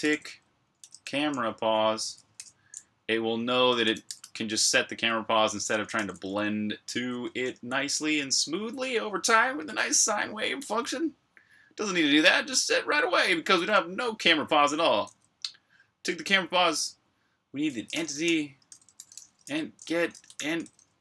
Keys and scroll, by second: 0.0-2.0 typing, 3.5-5.8 typing, 7.1-8.1 typing, 17.6-21.0 typing.